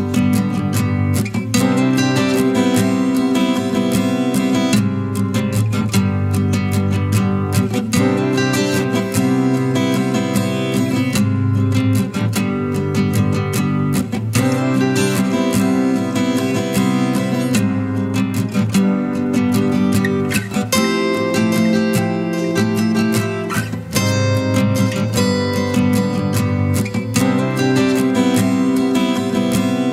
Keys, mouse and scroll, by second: 5.6 double click, 17.8 double click.